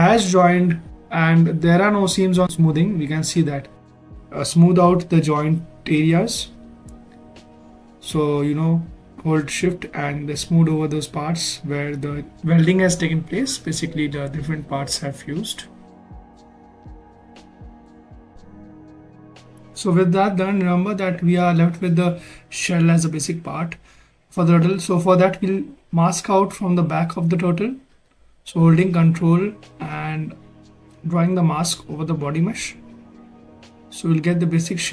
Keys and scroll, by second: 11.3 s, 24.5 ctrl+shift+z, 27.7 ctrl+shift+z.